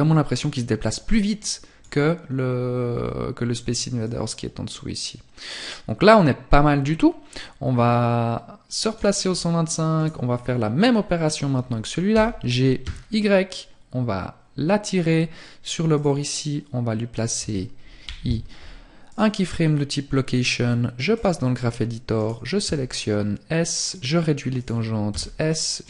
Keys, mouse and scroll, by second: 3.0 click, 8.2-8.9 scroll up 1, 8.9 right click, 8.9-9.3 scroll up 2, 9.3-9.9 scroll down 3, 9.9-10.5 scroll up 1, 11.1 g, 15.0 click, 18.1 i, 19.3 click.